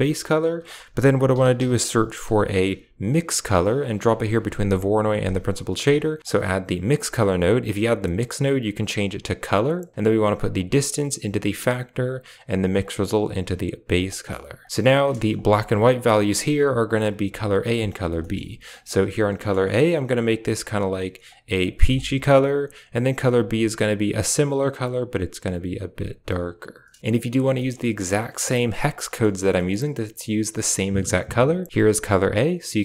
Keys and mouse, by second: 0.6 shift+a, 5.2 click, 6.2-8.8 drag, 9.4 click, 10.5-11.6 drag, 12.0 click, 12.7-13.8 drag, 14.0 middle click, 14.5 click, 15.3 ctrl+shift+click, 16.6 ctrl+shift+click, 17.8 ctrl+shift+click, 18.1 middle click, 18.6 click, 19.2 middle click, 19.9 click, 20.2 click, 22.2 click, 22.9 click, 23.3 click, 27.5 shift+middle click, 27.9-28.2 middle drag, 28.9 middle click, 29.4 middle drag, 31.4 click.